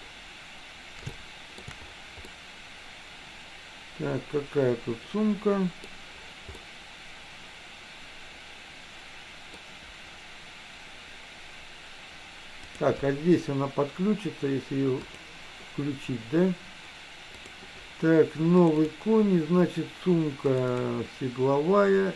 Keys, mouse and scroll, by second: 1.3 shift+middle click, 2.3-5.9 middle drag, 6.7-9.7 middle drag, 12.8-15.6 drag.